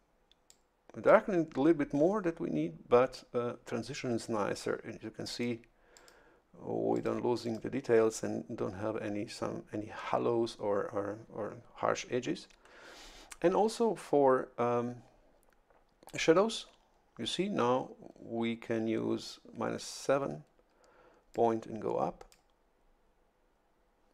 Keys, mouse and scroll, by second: 0.5 click, 5.3 click, 5.9 click, 6.9 click, 7.4 click, 21.3-22.5 drag.